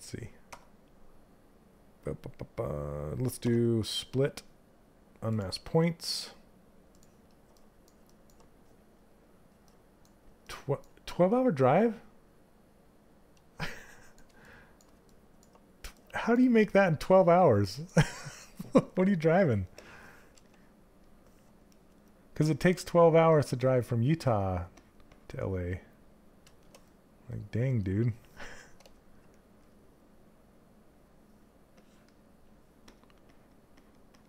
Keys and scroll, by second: 0.0 q.